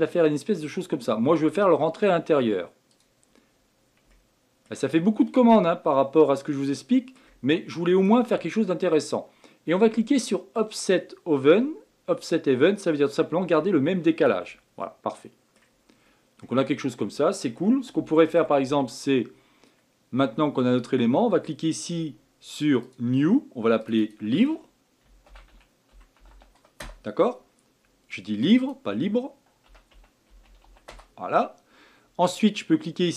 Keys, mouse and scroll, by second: 4.1-5.0 shift+middle drag, 5.0 scroll up 3, 5.6-10.5 middle drag, 14.1 click, 14.8-15.8 middle drag, 15.8 scroll down 1, 16.4-18.6 middle drag, 18.6 Tab, 22.8-23.9 drag, 24.0-27.1 drag, 28.4 click, 28.6-31.7 drag.